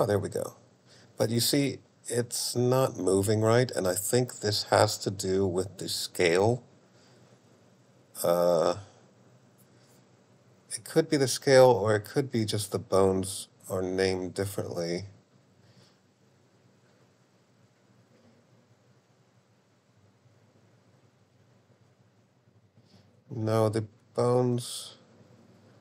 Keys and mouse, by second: 11.0 click, 13.0 click, 14.8 click, 17.4 click, 20.1 click, 21.6 click.